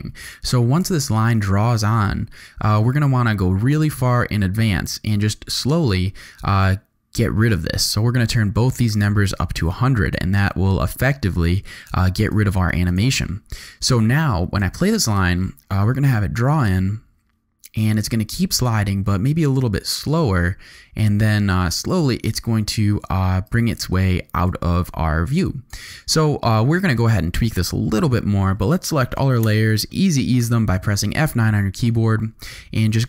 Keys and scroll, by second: 15.0 space, 23.3 space, 29.4 F9.